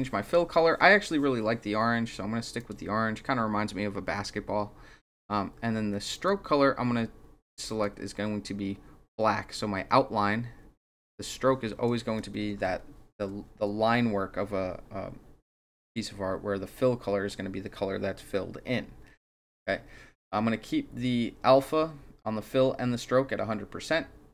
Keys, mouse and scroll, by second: 0.2 click, 2.5 click, 6.1 click, 7.6 click, 9.5-11.8 drag, 12.5 ctrl+z.